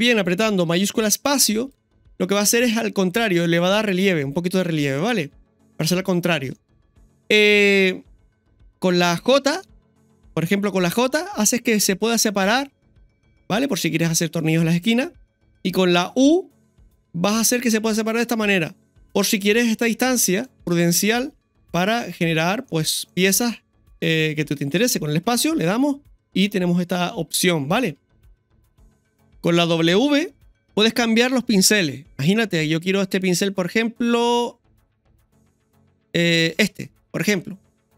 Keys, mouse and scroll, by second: 6.0 scroll up 1, 7.0-8.0 scroll down 2, 26.5 scroll up 1, 26.6 scroll down 1, 28.3-28.7 scroll down 1, 29.6-30.0 scroll up 3, 37.8 scroll down 1.